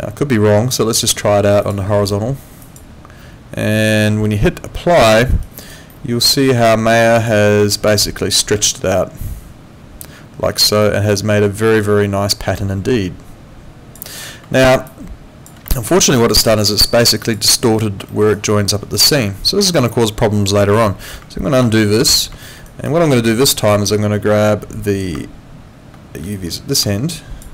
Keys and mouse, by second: 1.6 click, 5.1 alt+middle click, 5.4 alt+right click, 5.9 alt+middle click, 6.7 alt+click, 7.5 alt+middle click, 7.9 alt+click, 10.8 alt+middle click, 11.1 alt+click, 14.6 alt+middle click, 14.9 alt+click, 15.7 alt+middle click, 16.0 alt+right click, 17.2 alt+click, 18.1 alt+middle click, 18.4 alt+right click, 20.9 alt+middle click, 21.6 ctrl+z, 22.4 alt+middle click, 22.7 alt+right click, 23.5 alt+right click, 26.3 shift+click.